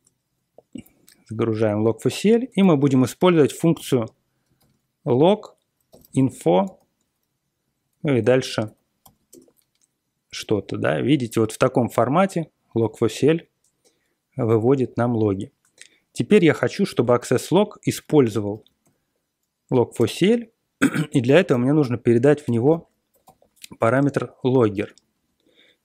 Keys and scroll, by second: 2.6 ctrl+l, 3.1-4.5 typing, 5.6-9.5 typing, 16.9 ctrl+x, 16.9-19.3 typing, 18.0 ctrl+x, 18.5 ctrl+x, 19.9 Return, 21.2-25.8 typing.